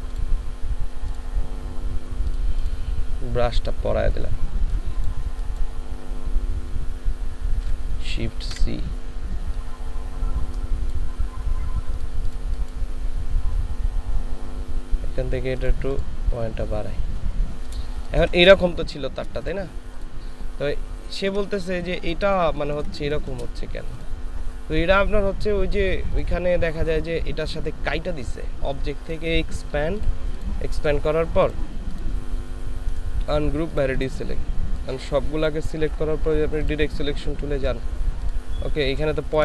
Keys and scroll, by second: 8.5 shift+c, 18.0 ctrl+space, 20.9 ctrl+space, 21.6 ctrl+space, 22.4 ctrl+space, 38.9 ctrl+space.